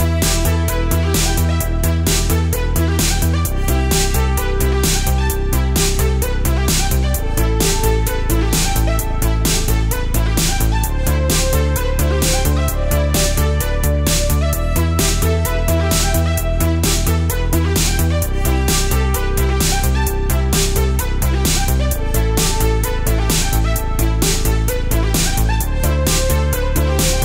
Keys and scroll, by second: 10.0 super+z, 11.0 super+z, 11.6 alt+super+space, 12.1 space, 12.7 space, 13.8 space, 14.1 space, 17.8 alt+super+space, 19.0 super+z, 19.8 super+z, 20.5 space, 21.4 super+z, 25.7 super+z, 26.2 super+x, 26.6 space.